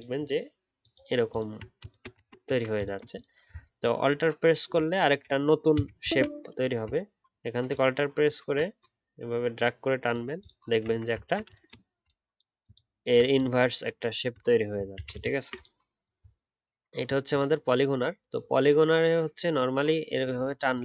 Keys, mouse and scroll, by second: 0.3-0.8 alt+scroll up 1, 0.8 alt+click, 2.2-3.6 alt+scroll down 1, 3.6-6.5 alt+scroll down 1, 7.6 alt+click, 11.2-11.8 alt+scroll down 2, 12.0-12.9 alt+scroll down 1, 12.9-14.0 alt+scroll up 1, 14.0-14.9 alt+scroll up 1, 14.9 ctrl+z, 15.1 ctrl+z.